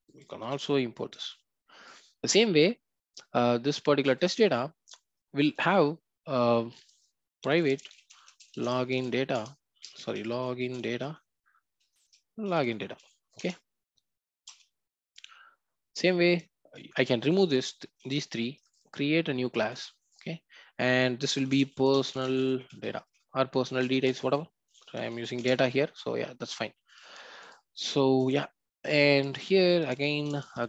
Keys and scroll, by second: 0.4 alt+Return, 9.3 Return, 13.4 Return, 17.9 ctrl+x, 28.2 ctrl+v.